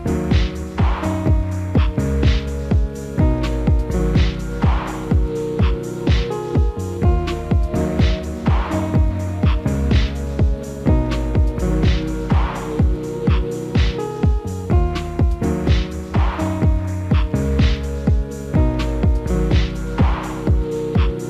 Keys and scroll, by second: 10.6 alt+w.